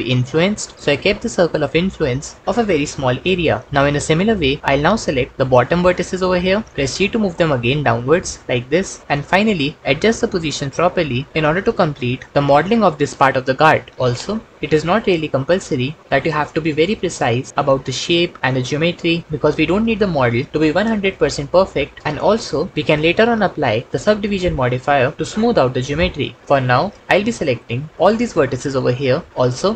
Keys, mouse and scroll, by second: 6.8 g, 9.3 g, 12.3 g.